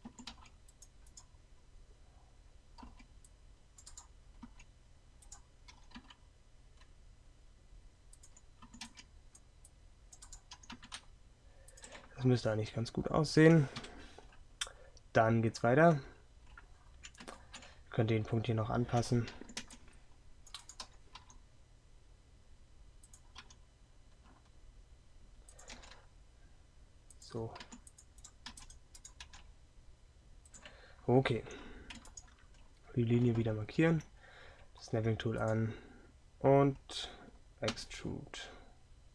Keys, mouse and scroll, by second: 0.1 z, 0.1 a, 5.8 g, 8.7 a, 13.9 KP_3, 19.5 a, 19.6 c, 25.6 r, 25.8 g, 27.7 a, 37.8 e.